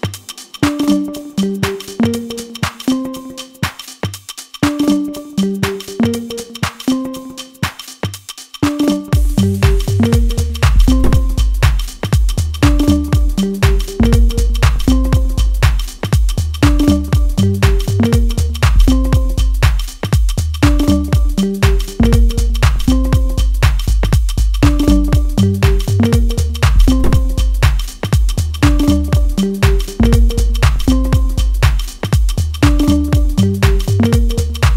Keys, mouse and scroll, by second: 0.2-12.9 middle drag, 16.3-19.4 middle drag, 21.2 click, 21.8-23.6 middle drag, 23.6 click, 26.1-28.5 shift+middle drag, 28.5 click, 30.9 click.